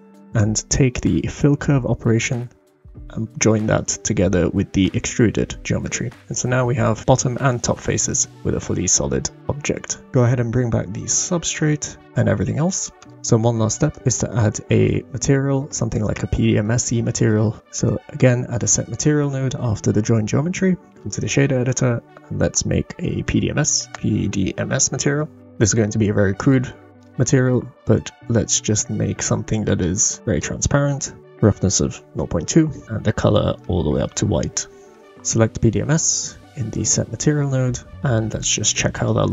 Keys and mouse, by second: 0.3-2.2 drag, 5.9-8.1 middle drag, 11.5 click, 13.0 click, 13.1 middle click, 13.9-15.5 drag, 15.9 click, 17.4 shift+a, 21.6-25.4 drag, 23.9 shift+BackSpace, 25.7 click, 25.7 middle click, 25.7 right click, 26.7 shift+click, 26.8 shift+middle click, 30.2 click, 31.2 click, 35.7-36.8 drag, 38.9-39.3 drag.